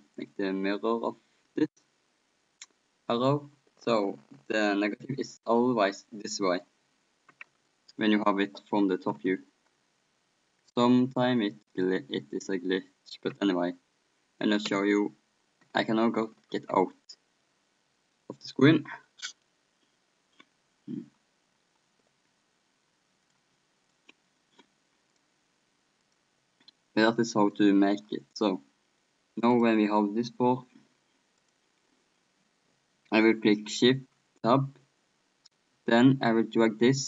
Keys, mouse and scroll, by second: 6.0-7.1 drag, 11.5-13.7 drag, 13.3 p, 14.8 p, 16.6 p, 17.9-19.9 middle drag, 23.3-25.0 drag, 23.3-24.9 middle drag, 25.1-29.0 drag, 29.0 middle click, 29.6-31.2 middle drag, 31.2 click, 31.4-33.1 drag, 36.6-37.0 shift+drag.